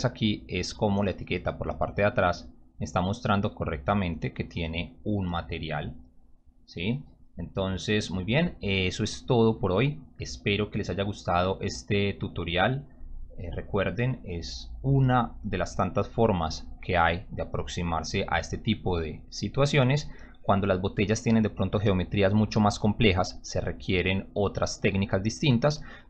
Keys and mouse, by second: 11.3 click.